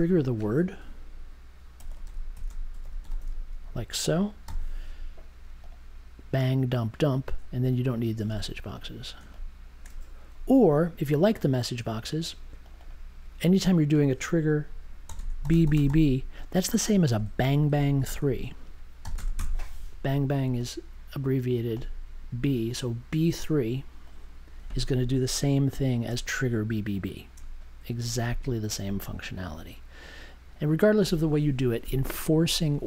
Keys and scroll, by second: 1.7-3.6 typing, 4.4 super+j, 14.8-17.1 typing, 19.0 b, 19.1 space, 19.3 3.